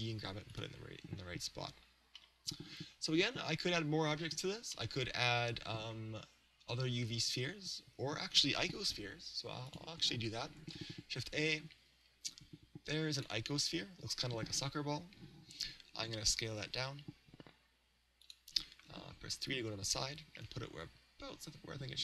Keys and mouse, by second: 0.6 click, 2.6-4.1 middle drag, 4.8-6.6 middle drag, 9.7-13.4 drag, 10.6 shift+a, 16.6 s, 18.4 click, 19.2 KP_3, 20.5 g.